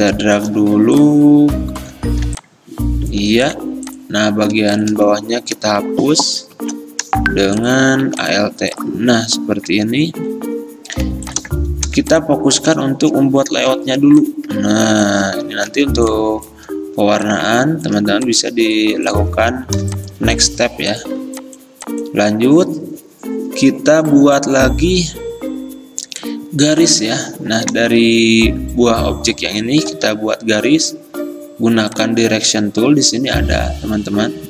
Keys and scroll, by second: 0.5 v, 2.3 r, 3.3 v, 6.4-8.1 typing, 11.1 i, 11.9 v, 13.7-15.8 typing, 19.9 v, 21.3 v, 30.0 a.